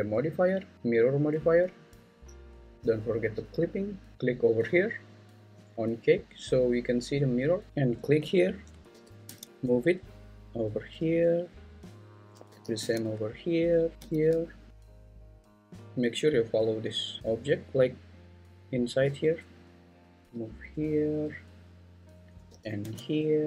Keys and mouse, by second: 5.9 click, 8.9 g, 9.2 x, 11.2 click, 12.5 g, 12.8 x, 13.9 g, 14.0 x, 14.9 g, 15.3 x, 20.3 g, 20.3 x, 20.9 click, 22.5 g, 22.8 x.